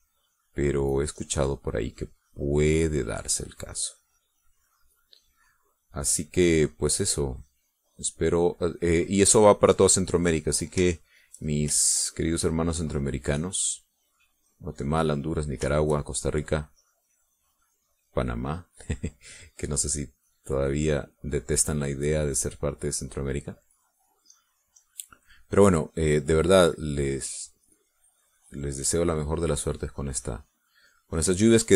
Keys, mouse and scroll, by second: 6.5-11.4 drag, 11.6 shift+click, 12.3 shift+click, 12.8-18.7 shift+drag, 19.1 click, 20.1-26.1 drag, 26.4-31.7 drag.